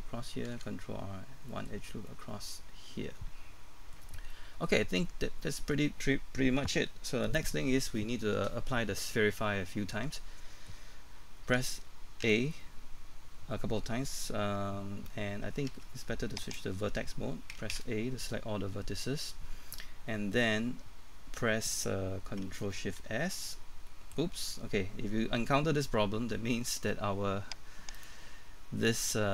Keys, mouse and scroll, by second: 1.5 ctrl+r, 1.5 middle click, 4.1 scroll up 1, 4.3 middle click, 11.6-12.2 typing, 15.7 ctrl+Tab, 16.4 click, 17.5 typing, 18.3 middle click, 23.1 ctrl+shift+s, 28.0 right click.